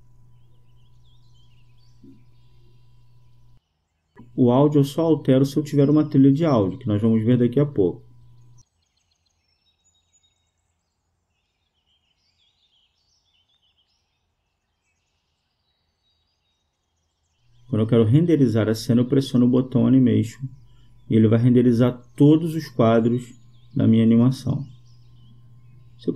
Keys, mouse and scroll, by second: 0.3 KP_0, 0.4 KP_0, 10.1-11.8 drag, 18.8-20.5 drag.